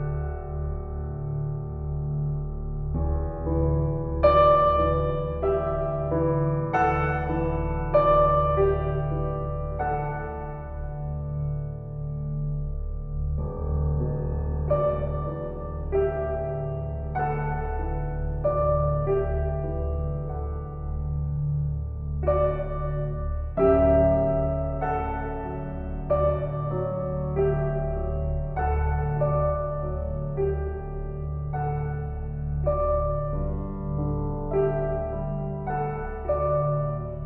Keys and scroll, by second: 28.1 F4, 35.2 shift+s.